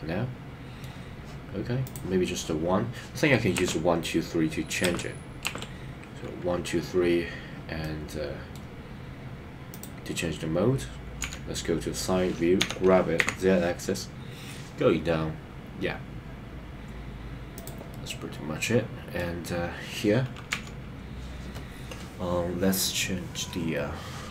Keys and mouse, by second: 1.8 click, 3.5 KP_1, 4.9 KP_2, 5.5 KP_3, 7.8 middle click, 9.7 click, 11.2 KP_3, 12.6 g, 13.3 z, 18.1-19.2 middle drag, 20.5 KP_3.